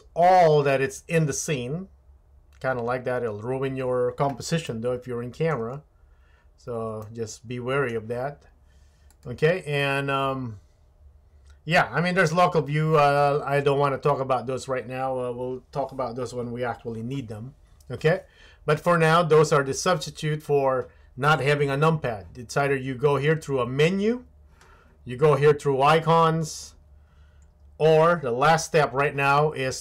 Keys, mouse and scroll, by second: 4.7-5.5 shift+middle drag, 7.0-8.0 shift+middle drag, 9.2-18.4 drag.